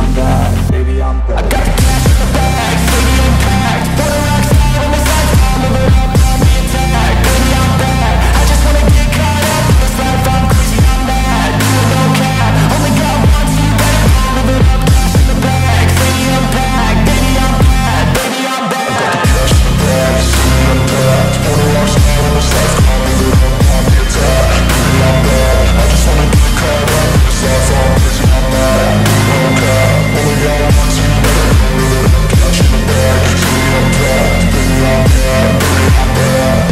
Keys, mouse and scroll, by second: 0.2-0.6 scroll down 1, 1.6 alt+click, 3.3-4.4 scroll up 1, 4.5 alt+middle click, 6.2-7.5 scroll down 1, 9.2 alt+click, 11.0 alt+click, 12.4 alt+click, 17.0-18.2 scroll up 1, 21.0 scroll up 1, 21.2 alt+click, 21.6-22.7 scroll up 1, 22.7 typing, 23.2 right click, 25.0 typing, 25.6 alt+click, 27.4 alt+click, 30.3 alt+middle click, 30.8-31.3 scroll up 1, 31.3-31.6 scroll down 1, 31.6 alt+click, 32.3 alt+middle click, 32.5 alt+click, 36.2 alt+click.